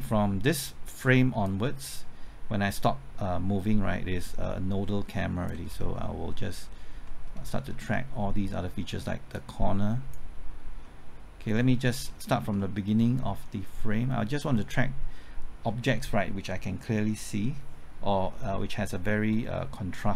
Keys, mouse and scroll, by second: 1.4-5.6 drag, 5.6 scroll down 1, 6.0 middle click, 7.4 scroll up 1, 7.7 middle click, 8.0 scroll up 1, 9.3-10.8 drag, 10.8 middle click, 12.0-12.6 scroll down 1, 12.6 middle click, 12.9-13.3 scroll up 1, 13.4 middle click, 13.8-18.4 scroll up 1, 19.3 middle click.